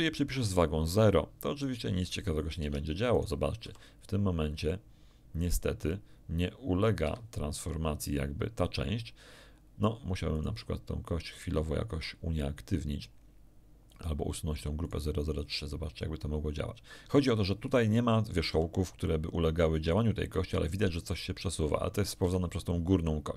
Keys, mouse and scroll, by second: 0.4 click, 1.6 click, 2.5 Tab, 3.1 right click, 3.6 r, 7.0 Escape, 7.5 scroll down 2, 10.3 right click, 14.8 right click, 18.5 r, 22.2 Escape.